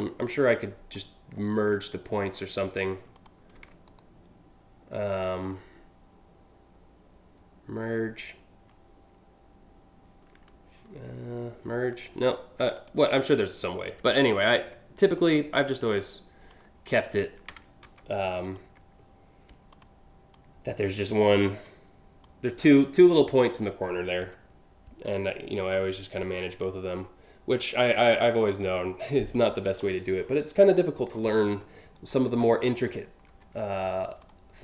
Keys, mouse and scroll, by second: 1.9 ctrl+click, 2.8 ctrl+shift+click, 3.5 right click, 12.4 ctrl+click, 13.3 scroll down 1, 14.8 ctrl+click, 15.2 ctrl+click, 17.5 ctrl+z, 18.1 ctrl+click, 19.4 ctrl+click, 20.0-21.0 ctrl+drag, 21.3 ctrl+click, 22.3 ctrl+click, 23.8 ctrl+z, 24.7 ctrl+click, 26.0-27.1 ctrl+drag, 27.9 ctrl+click, 28.2 ctrl+click, 29.3-30.0 scroll down 2, 30.3-31.3 alt+scroll down 5, 31.7-32.7 alt+scroll up 7, 33.9 ctrl+click, 34.4 ctrl+click.